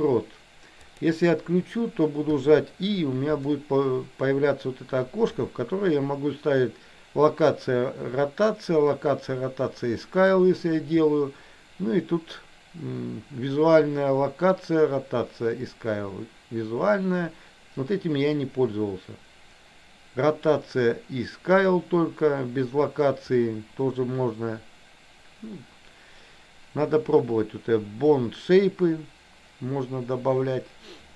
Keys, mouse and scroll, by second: 2.4 i.